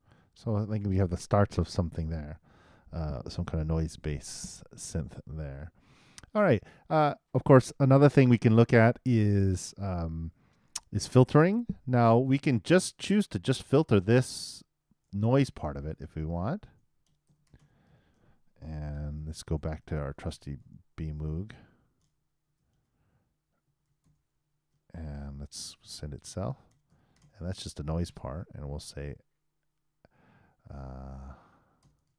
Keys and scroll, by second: 0.1 super+., 19.8 shift+space, 20.0 shift+b, 21.2 shift+m, 21.5 shift+o, 24.1-24.9 typing.